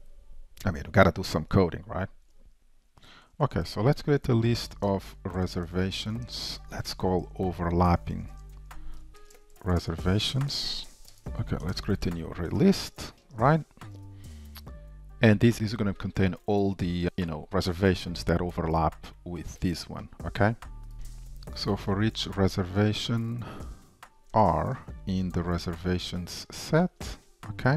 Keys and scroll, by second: 11.8 Return, 12.6 shift+super+Return, 13.3 ctrl+shift+Return, 23.7 Return, 26.6 Return.